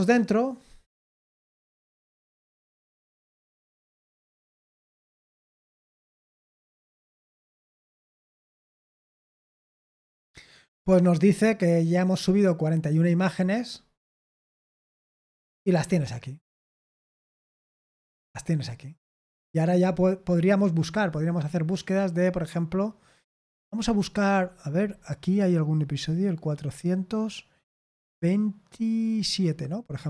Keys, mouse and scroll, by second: 11.9 click, 14.7-15.9 scroll down 4, 17.1-18.9 scroll up 3, 18.9-19.2 scroll up 1, 19.2-19.6 scroll down 3, 19.8-20.9 scroll up 2, 20.9 click, 25.1-25.7 scroll down 2, 26.5-27.1 scroll down 2, 29.4-30.0 scroll up 2.